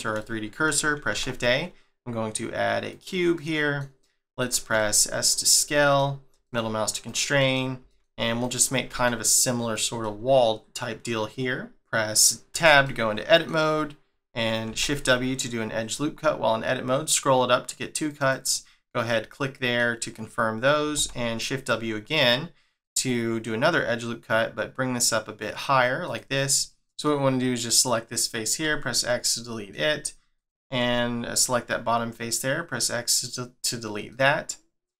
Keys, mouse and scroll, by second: 0.2 shift+middle click, 1.1 shift+a, 3.3 middle click, 4.7 s, 5.7 middle click, 6.3 s, 7.4 middle click, 7.8 s, 10.0 middle click, 12.8 middle click, 14.7 shift+w, 19.1 middle click, 20.9 shift+w, 26.5 middle click, 27.7 click, 28.6 x, 29.0 middle click, 30.3 click, 30.8 x, 31.6 middle click, 33.4-34.1 scroll up 1, 34.1 middle click.